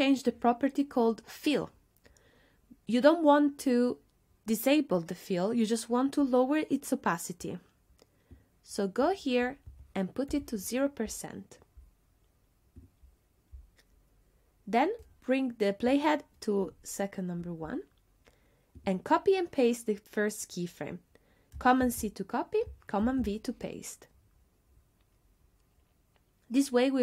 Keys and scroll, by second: 9.7 BackSpace, 10.3 Return, 21.9 super+c, 23.1 super+v.